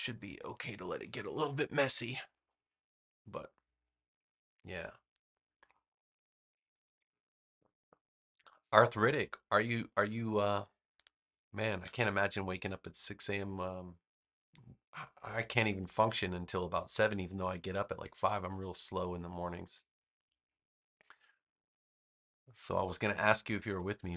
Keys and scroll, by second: 23.8 super+=.